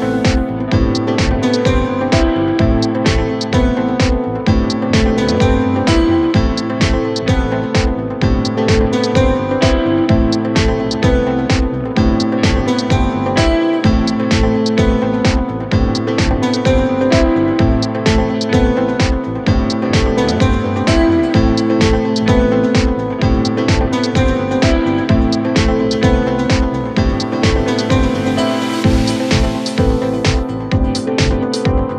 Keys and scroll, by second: 4.9-5.9 typing.